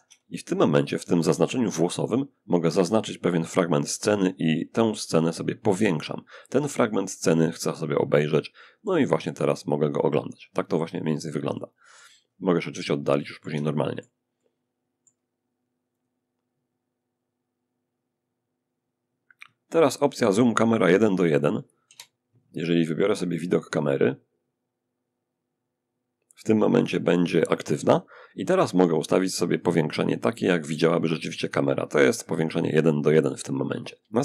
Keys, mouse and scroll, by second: 1.8-4.5 drag, 6.9-14.9 middle drag, 15.2 click, 21.1 0, 23.0 click, 29.2 click.